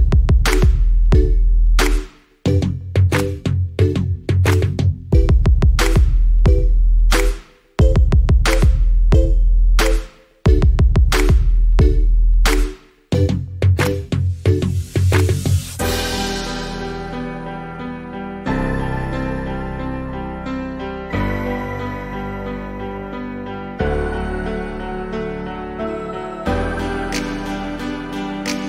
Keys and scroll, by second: 13.6 s, 16.5 Return.